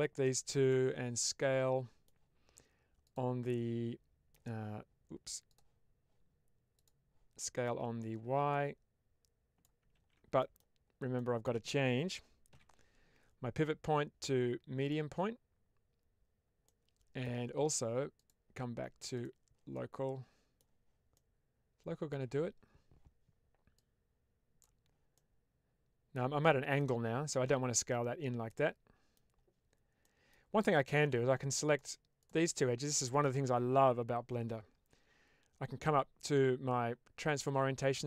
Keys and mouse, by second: 0.6-1.9 middle drag, 3.4 middle click, 5.4 click, 6.6 click, 7.3 middle click, 8.5-9.5 drag, 9.9 ctrl+z, 10.3 middle click, 11.1 shift+middle click, 16.6 middle click, 18.0-19.4 drag, 19.7 middle click, 21.0 middle click, 23.6 click, 25.1-26.8 middle drag, 28.4 middle click, 29.9 middle click, 30.6 click, 31.5 click.